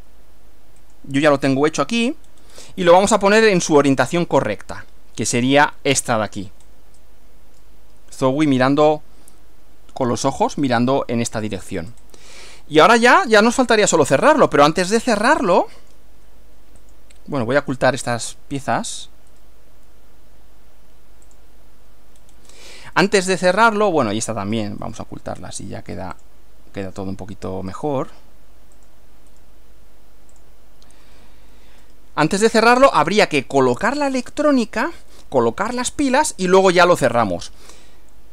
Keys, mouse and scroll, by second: 0.8 click, 2.3-2.7 scroll down 2, 3.3-5.1 middle drag, 6.6 scroll up 2, 7.0-7.8 shift+middle drag, 11.8 scroll up 2, 11.9 scroll down 2, 12.0 scroll up 2, 12.6-13.7 shift+middle drag, 14.0 shift+middle click, 14.9-16.2 middle drag, 16.8 click, 18.7 ctrl+click, 19.4 ctrl+right click, 21.4 click, 22.2-22.5 scroll down 2, 22.5 scroll up 2, 23.0 middle click, 24.6 click, 24.8 right click, 24.8 middle click, 26.2 click, 27.8 click, 28.8 click, 29.4 right click, 30.4 click, 31.8 shift+middle click, 32.7-33.2 shift+scroll up 2, 33.6 shift+middle click.